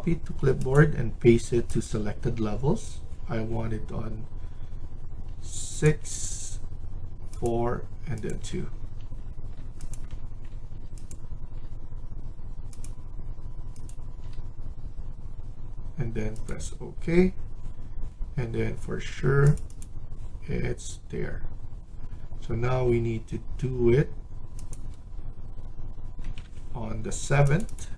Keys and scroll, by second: 25.9-26.7 typing.